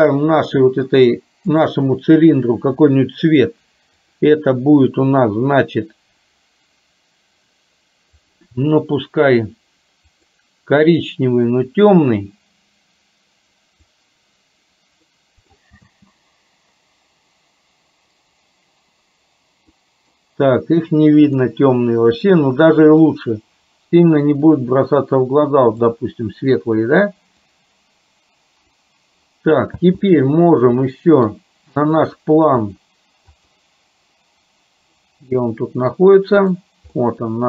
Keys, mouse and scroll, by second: 4.1 click, 8.3 click, 15.2 middle click, 15.9 space, 19.7 middle click, 30.0 space, 30.9 middle click, 31.8 click, 35.2 middle click, 36.5 click, 37.0-37.4 middle drag.